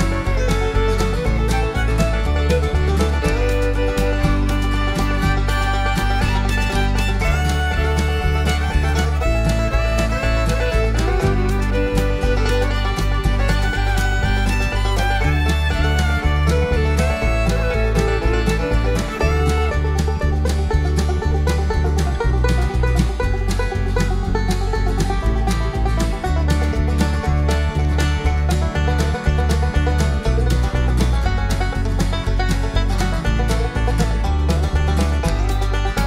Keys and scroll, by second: 13.5 d, 15.4 [, 15.6 [, 15.8 [, 28.8 s, 29.8 ], 31.0 b.